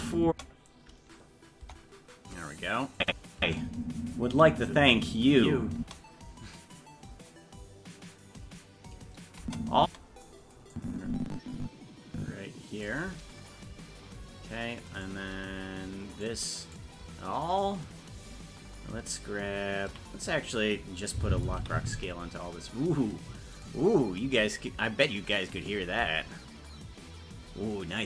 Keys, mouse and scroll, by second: 0.2 space, 1.6 KP_0, 2.9 click, 3.3 space, 6.6 space, 10.2 space, 10.7-12.8 drag, 15.0 right click, 16.2 shift+right click, 19.9 a, 21.6 i.